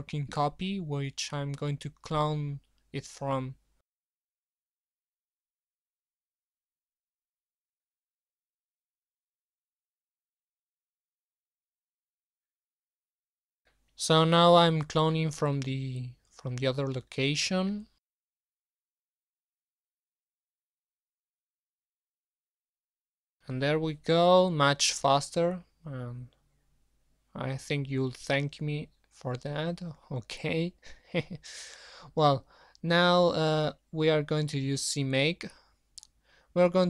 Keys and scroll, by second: 15.7 ctrl+c, 17.3 alt+Up, 17.6 alt+Tab, 19.1 ctrl+v, 30.4 ctrl+c, 35.5 super+Up.